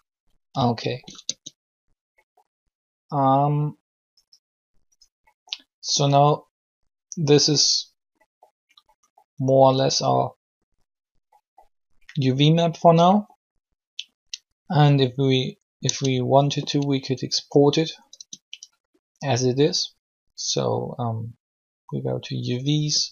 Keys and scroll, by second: 1.2 alt+shift+Tab, 15.8 Tab, 18.1 Tab.